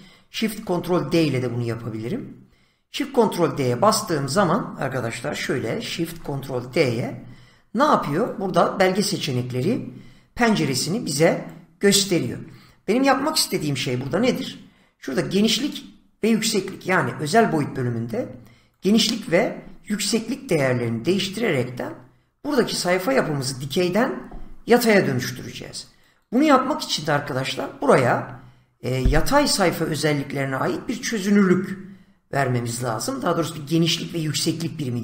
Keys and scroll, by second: 0.7 ctrl+shift+d, 6.0 ctrl+shift+d, 13.8 <.